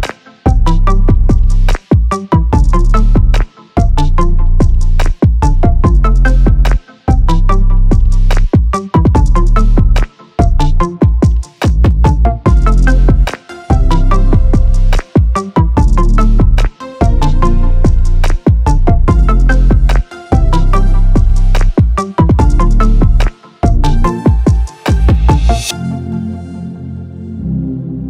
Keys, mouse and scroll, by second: 0.5 click, 2.8 click, 4.2 click, 5.1 ctrl+z, 5.7-6.4 drag, 7.1 click, 8.0 click, 8.3 click, 9.1 shift+click, 9.9 click, 10.2 click, 10.5 shift+click, 10.7 shift+click, 11.4 shift+click, 11.6 shift+click, 12.2 click, 14.0 click, 14.7 click, 15.8 click, 16.4 shift+click, 16.7 shift+click, 17.1 shift+click, 17.4 shift+click, 17.6 shift+click, 17.9 shift+click, 18.5 shift+click, 19.5 shift+click, 20.8 shift+click, 21.9 shift+click, 22.6 shift+click, 24.0 click, 25.7 click, 26.3 click.